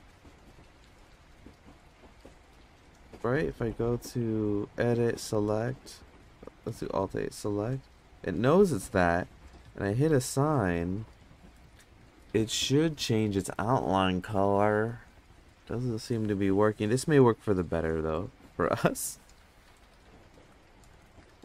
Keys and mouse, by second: 3.4 click, 4.4 Tab, 5.1 click, 6.7 alt+a, 7.7 click, 9.4 click, 9.7 click, 9.8 click, 10.0 click, 10.1 click, 10.3 click, 10.4 click, 11.2 click, 11.6 click, 11.8 click, 12.0 click, 12.2 click, 21.2 click.